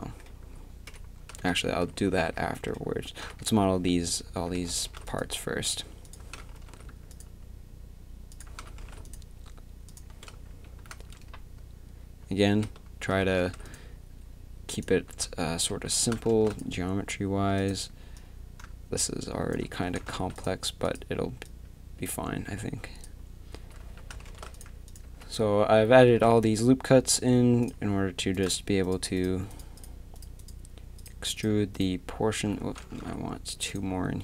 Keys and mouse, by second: 0.3 z, 0.9 KP_1, 1.5 ctrl+z, 2.1 z, 3.2 KP_7, 3.4 z, 4.3 a, 4.8 ctrl+r, 6.2 a, 6.6 ctrl+r, 8.5 a, 8.8 ctrl+r, 10.5 a, 13.4 ctrl+r, 15.2 2, 15.7 z, 16.0 a, 16.3 ctrl+r, 19.8 a, 20.1 ctrl+r, 23.8 a, 24.3 ctrl+r, 25.0 z, 25.7 z, 26.2 z, 32.6 a, 33.0 ctrl+r.